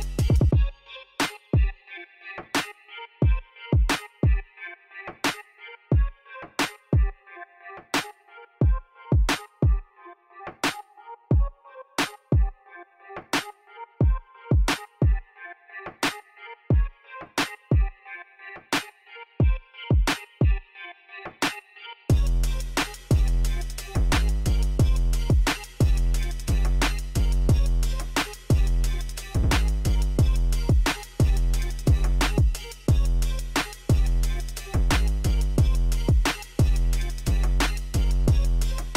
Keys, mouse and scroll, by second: 0.7 scroll down 1, 1.4 middle click, 2.0 Escape, 2.3 click, 3.1-4.1 scroll up 3, 4.5 click, 5.3 click, 6.1 KP_2, 6.2 KP_0, 6.4 Return, 7.0 Escape, 7.2 scroll down 1, 7.9 scroll down 1, 8.3 middle drag, 9.3 scroll up 1, 9.6 middle drag, 10.3 middle click, 11.7 click, 13.3 click, 14.3 middle click, 15.3 click, 19.1-19.8 scroll down 1, 19.8-20.3 scroll up 1, 22.7 click, 26.0-27.1 middle drag, 27.5 middle click, 29.4 click, 30.7 click, 31.4 click, 32.1 click, 34.2 click, 35.0-35.4 scroll down 1, 35.4-35.8 middle drag, 36.6 click, 37.3 KP_0, 37.5 KP_5, 37.8 Return, 38.5 click.